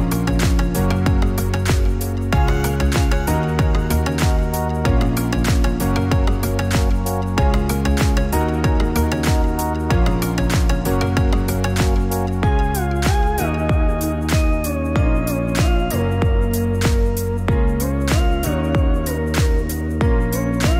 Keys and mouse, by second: 2.8 click, 6.6 alt+shift+click, 8.1 alt+shift+click, 13.2 alt+shift+click, 16.9 middle click, 18.9 alt+shift+click, 19.4 middle click.